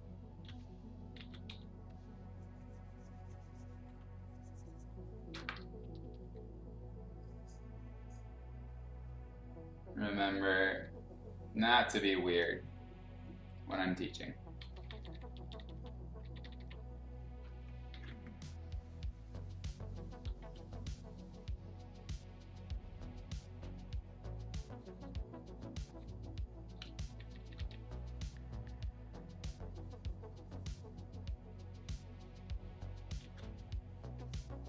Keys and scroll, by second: 0.4 x, 1.1 ctrl+z, 1.4 x, 5.8 ], 10.0 ], 10.7 ], 13.7-16.4 typing, 17.9 ctrl+z, 20.4 x, 27.0 ], 27.5 ], 33.2 ctrl+z.